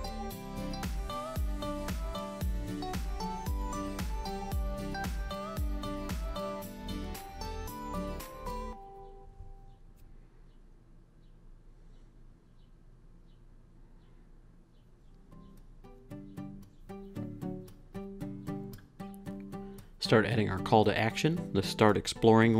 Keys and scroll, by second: 1.0 Up, 1.6 Up, 3.4 super+s, 14.3-15.1 typing, 17.1 t, 18.2-20.7 typing.